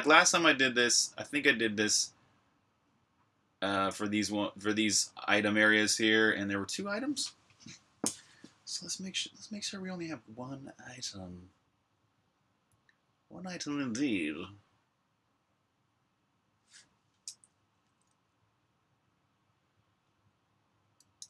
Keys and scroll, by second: 17.7 super+r, 17.8-19.2 typing, 18.2 super+h.